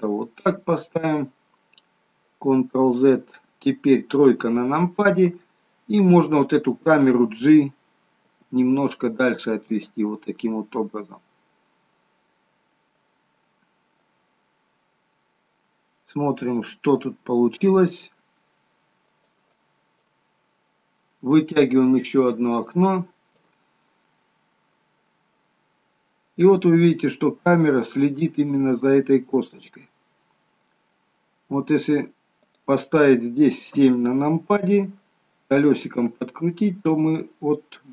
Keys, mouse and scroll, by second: 1.0-1.4 scroll up 3, 1.4 middle click, 19.4 click, 22.0 click, 25.5 g, 33.8 KP_7, 35.3 scroll down 5, 36.3 g.